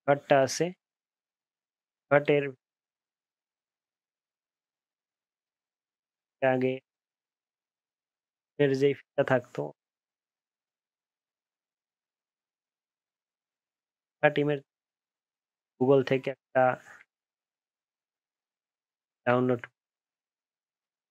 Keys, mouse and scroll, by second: 5.0 alt+scroll down 1, 5.5-5.9 alt+scroll up 1, 6.1 alt+scroll down 1, 6.4 alt+scroll up 1, 6.8 alt+scroll down 1, 7.3 alt+scroll up 1, 7.5 alt+scroll down 1, 10.9-11.2 alt+scroll down 1, 11.2 alt+scroll up 1, 11.7 alt+scroll down 1, 12.1 alt+scroll up 1, 12.5 alt+scroll down 1.